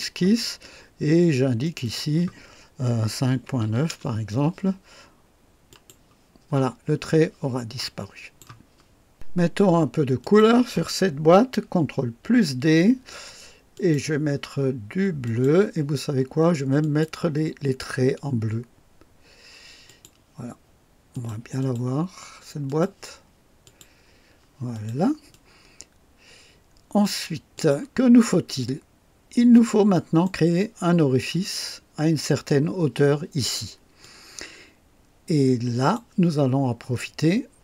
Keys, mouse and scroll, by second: 1.6 click, 2.9 KP_5, 3.2 KP_Decimal, 3.5 KP_9, 3.8 Return, 5.6 click, 7.8 click, 10.1 click, 12.2 ctrl+d, 13.6 click, 15.1 click, 16.7 click, 19.8 click, 21.0 click, 21.5 click, 22.6 click, 23.5 click, 24.6 click, 25.2-27.1 drag, 27.5 click, 28.5-29.8 drag, 29.8 right click, 33.9-36.1 drag.